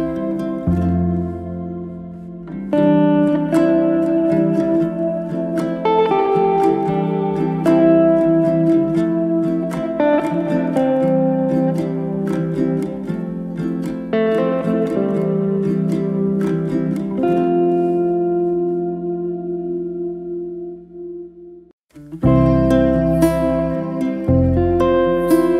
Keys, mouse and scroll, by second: 1.6-2.0 scroll up 2, 2.0 click, 2.4 shift+click, 3.6-4.6 drag, 4.6 alt+d, 6.5 z, 6.6 z, 6.8-7.7 middle drag, 7.7 click, 8.5 r, 10.7 r, 13.8-16.1 middle drag, 16.1 g, 17.2-18.3 middle drag, 18.3 drag, 18.6-19.0 middle drag, 19.0 click, 19.3 middle click, 19.8 g, 20.8 middle click, 21.0 drag, 21.1 scroll down 2, 21.4-22.4 middle drag, 22.4 drag, 22.8 shift+click, 23.8 g, 24.7 middle click.